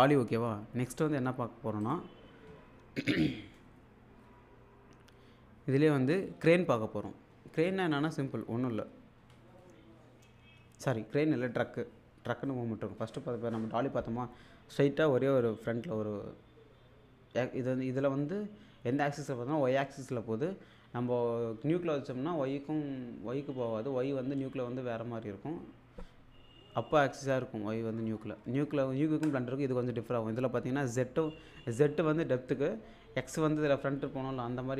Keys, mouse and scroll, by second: 1.8 click, 28.4 alt+Tab.